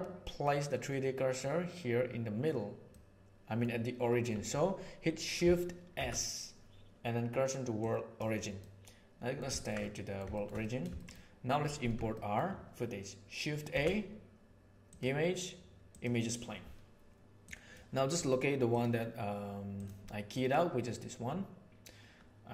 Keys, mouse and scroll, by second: 0.4-1.3 middle drag, 2.8 middle click, 5.9 shift+s, 8.6-9.3 middle drag, 9.5 ctrl+middle click, 9.8-10.1 middle drag, 10.5 middle click, 10.9 shift+middle click, 12.0 shift+middle click, 13.6 shift+a.